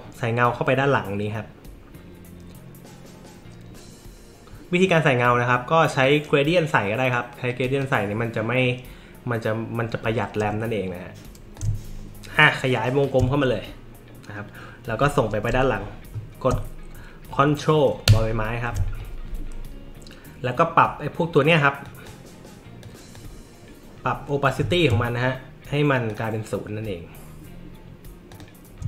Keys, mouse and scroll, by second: 7.7 click, 11.5-13.0 alt+shift+drag, 18.0 ctrl+[, 21.8 drag, 22.8-23.1 drag.